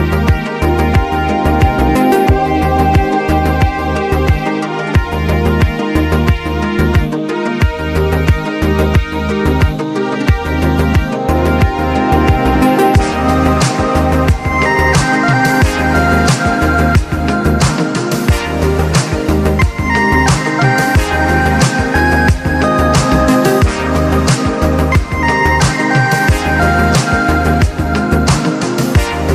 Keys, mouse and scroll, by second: 2.1 ctrl+z, 2.8-4.8 shift+drag, 8.3-10.8 alt+shift+drag, 11.0-12.9 drag, 12.9-15.2 drag, 15.2-16.6 drag, 16.6-21.1 alt+drag, 19.9 typing, 21.1-24.9 drag, 22.6 typing, 24.9 scroll down 1, 25.6 click, 25.8 right click, 26.1 click, 26.7-27.3 scroll down 2, 27.6 scroll up 1, 28.6 typing, 28.6-29.3 drag.